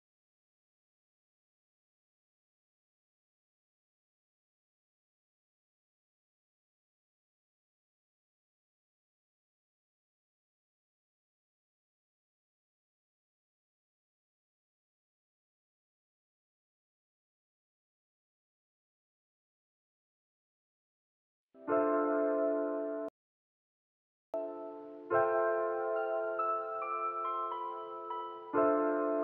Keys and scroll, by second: 4.7 space, 11.9 u, 20.6 alt+x.